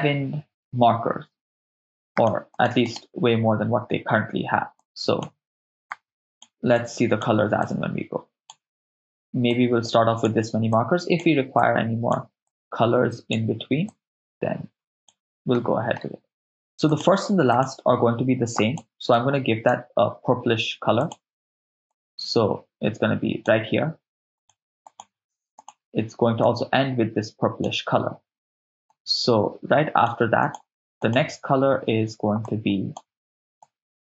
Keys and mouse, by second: 2.2 click, 2.8 click, 4.8-5.9 drag, 5.9 click, 6.3 click, 6.7-9.2 drag, 9.5-10.1 drag, 10.7-11.1 drag, 11.7-15.6 drag, 15.6 middle click, 16.9 click, 17.5 click, 18.7 click, 21.0 click, 24.9 click, 25.6-26.5 drag, 28.9 click, 30.4 click, 31.1 click.